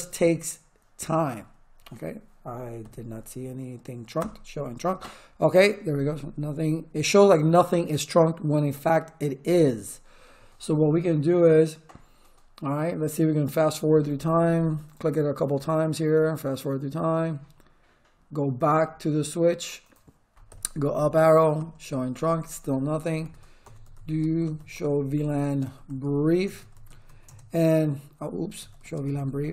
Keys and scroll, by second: 2.8 Up, 4.1 Return, 20.4 Up, 21.5 Return, 23.2-29.5 typing.